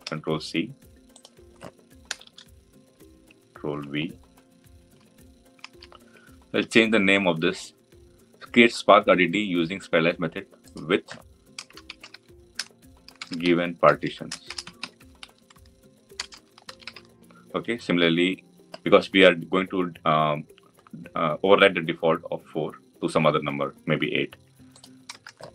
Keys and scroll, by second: 3.6 ctrl+v.